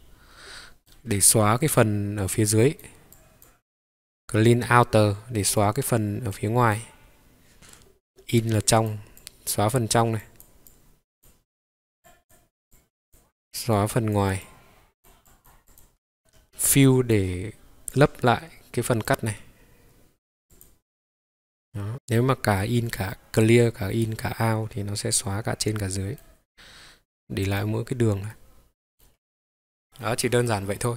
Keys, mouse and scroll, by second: 16.2 click, 16.2 middle click, 20.5 click, 21.7 middle click, 25.1-26.2 middle drag, 27.4 click, 28.3 middle click, 29.8 middle click, 29.8 click.